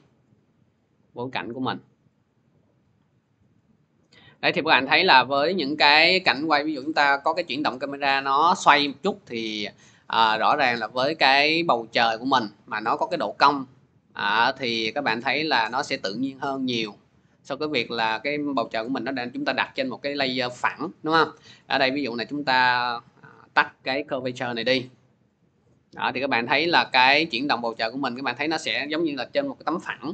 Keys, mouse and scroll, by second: 1.2-3.0 drag, 4.0 click, 4.4 click, 5.8 click, 8.3 scroll, 10.0 click, 10.0-13.4 middle drag, 17.7 click, 21.8 click, 23.3 click, 24.0 0, 24.6 click, 28.0-29.8 drag.